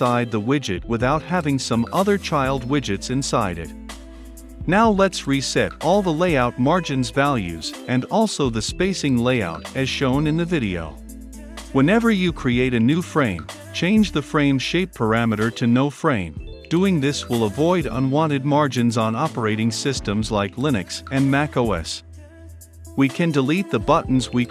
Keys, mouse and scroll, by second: 0.6-10.6 drag, 11.1-13.5 drag, 13.9-15.0 drag, 16.2-24.5 drag.